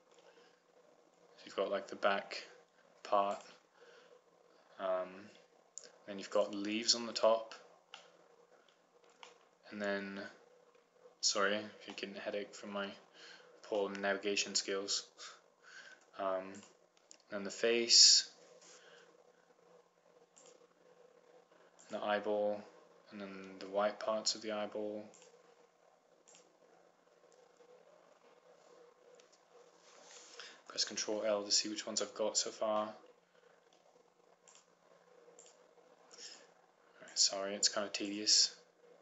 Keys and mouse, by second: 4.4-5.5 right drag, 7.5-8.6 right drag, 8.6 middle click, 11.1 middle click, 11.6 middle click, 13.5-15.9 middle drag, 17.8-18.9 right drag, 21.7-24.1 right drag, 26.7-28.6 right drag, 31.7 ctrl+l, 35.7-39.0 right drag.